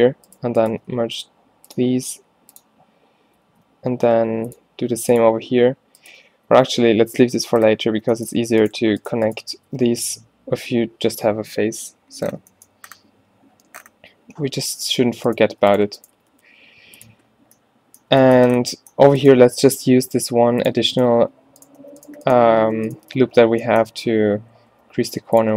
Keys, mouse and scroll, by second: 1.0 w, 3.5 ctrl+e, 4.2 ctrl+r, 5.0 ctrl+r, 6.6 ctrl+z, 9.6 f, 15.3 click, 16.2 g, 17.3 click, 17.6 click, 20.0 v, 21.3 g, 22.6 g, 23.1 f, 24.8 s.